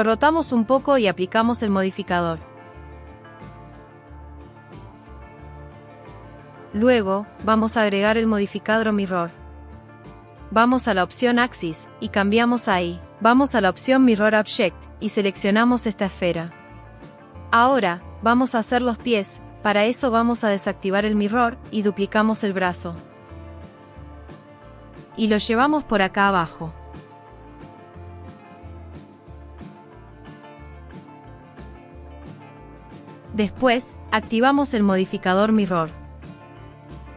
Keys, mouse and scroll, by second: 0.2 middle click, 0.9 r, 2.7 click, 3.4 click, 5.1 click, 9.4-10.8 drag, 11.6 click, 12.5 click, 21.8 click, 23.8 shift+d, 24.3 middle click, 24.8 click, 25.8 r, 27.2 click, 27.8 r, 28.3 click, 28.5 g, 29.6 click, 29.7 g, 31.7 click, 32.4 click, 34.1 click, 35.4 click, 36.9 click.